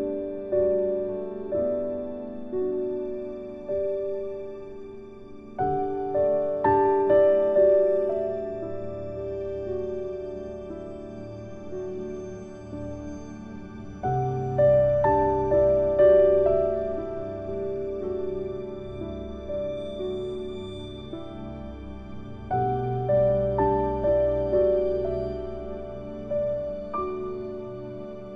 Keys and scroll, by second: 0.1 ctrl+z, 9.4 ctrl+z, 14.3 ctrl+z, 17.5 ctrl+z.